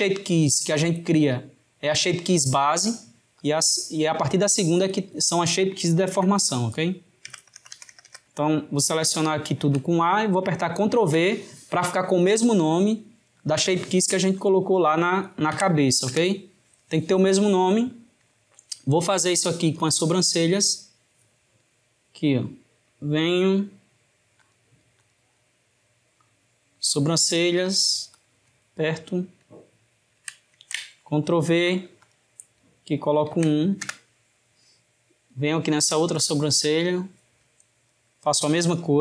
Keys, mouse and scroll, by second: 3.6-6.5 drag, 7.4 BackSpace, 14.5-17.4 drag, 19.9 click, 22.3-24.4 middle drag, 24.4-25.5 drag, 25.5-27.8 middle drag, 27.8-30.9 drag, 32.1-35.1 drag, 35.3 click, 36.4 click, 38.1-39.0 drag.